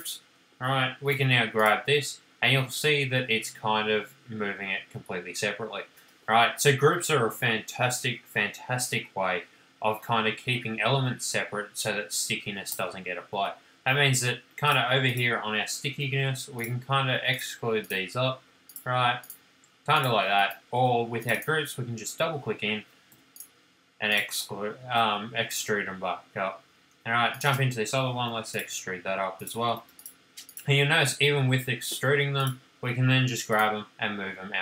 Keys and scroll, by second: 1.1 m, 13.4 space, 16.2 p, 20.4 space, 23.3 p, 24.9 space, 28.4 p, 29.9 space, 33.5 m.